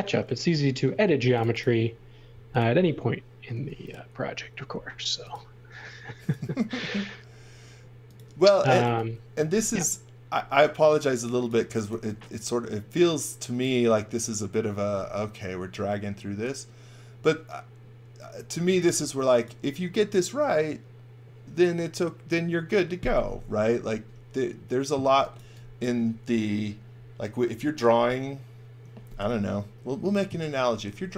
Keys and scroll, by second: 0.0-0.9 typing, 3.5 r, 8.6 x, 8.8 v, 11.4-12.4 typing, 18.3-19.3 typing, 25.1 x, 25.4 v.